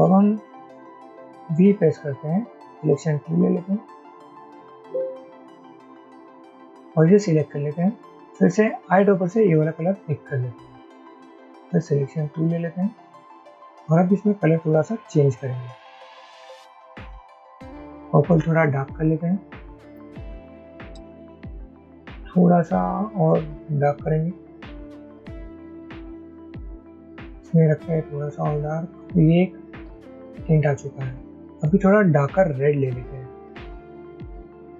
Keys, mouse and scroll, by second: 2.9 typing, 9.0 typing, 19.4 typing.